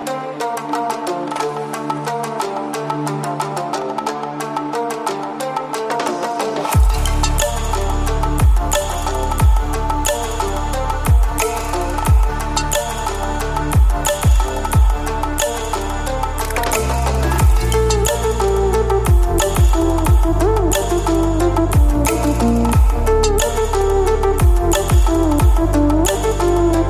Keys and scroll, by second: 2.5-4.7 typing, 7.2-9.6 typing, 19.1 ctrl+space, 19.6 ctrl+space.